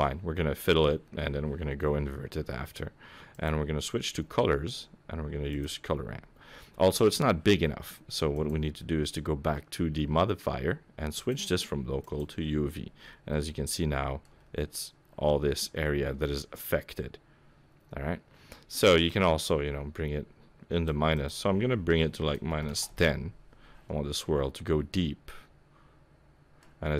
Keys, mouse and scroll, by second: 3.3 click, 4.1-5.5 scroll down 6, 5.5 click, 5.9-6.3 scroll down 2, 8.3 click, 11.1 click, 12.7-13.4 scroll down 8, 13.3 middle click, 14.3-16.0 scroll up 1, 16.0 scroll up 1, 19.0 click, 21.1 click, 24.1 middle click.